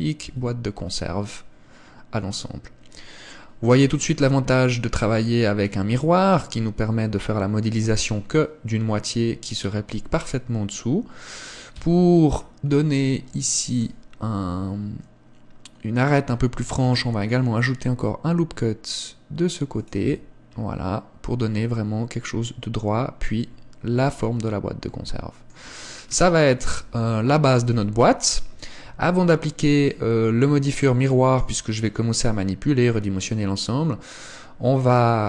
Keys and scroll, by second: 0.3 Tab, 11.8 Tab, 16.9 ctrl+r, 20.1 Tab, 26.7 KP_0, 27.8 KP_1.